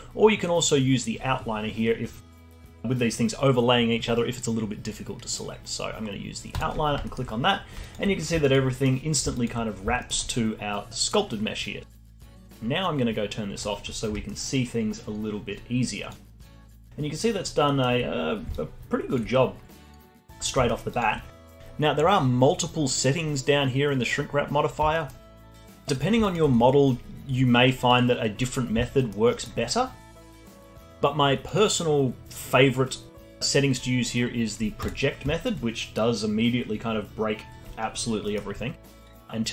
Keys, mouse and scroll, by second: 7.0 alt+middle click, 7.8 alt+click, 8.7 alt+middle click, 9.3 alt+click, 9.9-13.1 alt+middle drag, 13.5 click, 14.2 alt+middle drag, 14.5-16.2 alt+drag, 16.2 scroll down 2, 16.5-17.6 alt+drag, 17.6-18.2 alt+middle drag, 18.2 scroll down 1, 18.5-19.2 alt+drag, 19.2-19.9 scroll up 2, 19.9 alt+middle click, 20.1-20.6 alt+drag, 20.6 alt+middle click, 20.8-21.6 alt+drag, 24.9 middle click, 25.2 click, 25.9 drag, 26.2-28.9 alt+drag, 28.9-31.4 alt+middle drag, 31.4-34.5 drag, 35.3-35.8 alt+middle drag, 35.8 scroll down 1, 36.9 scroll down 1, 37.3 scroll up 1, 37.7-39.5 alt+middle drag.